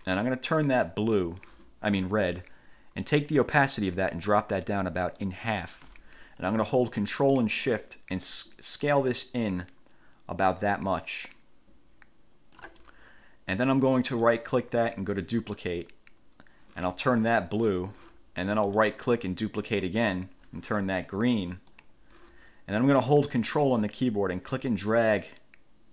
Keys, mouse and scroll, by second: 1.0 click, 4.0-5.6 drag, 8.4-12.9 ctrl+shift+drag, 14.2 click, 15.5 click, 17.6 click, 18.8 right click, 20.2 click, 21.8 click, 25.0-25.9 ctrl+drag.